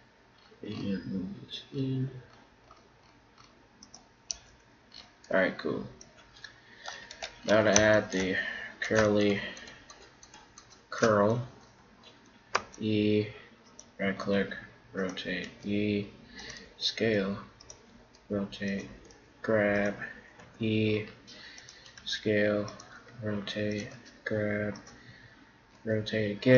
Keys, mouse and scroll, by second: 4.4 Tab, 4.8 click, 5.0 middle click, 6.4 middle click, 7.1 Tab, 7.3 middle click, 8.8-12.1 right drag, 12.6 e, 14.2 r, 15.5 e, 16.7 s, 18.1 r, 19.1 g, 20.4 e, 22.0 s, 23.0 r, 23.8-25.7 drag, 23.9 g, 25.8 r.